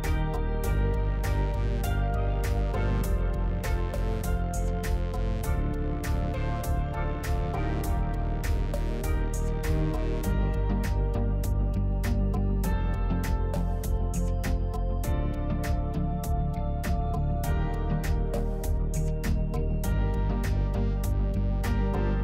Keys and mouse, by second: 0.3 Tab, 0.6-1.7 drag, 1.7 Tab, 2.4 click, 4.2 click, 5.3 g, 7.1 g, 9.4 Tab, 10.0-11.1 drag, 11.4 Tab, 12.5 click, 13.5 g, 14.6 Tab, 15.1 middle click, 16.4 middle click, 17.0 Tab, 17.6 middle click, 18.8 click, 19.7 middle click, 21.1 g.